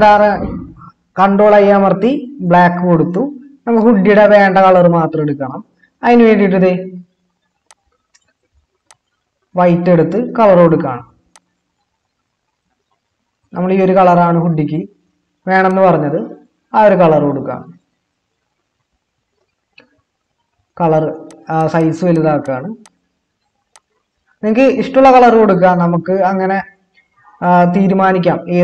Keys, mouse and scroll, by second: 1.6 ctrl+i, 20.2-21.1 typing.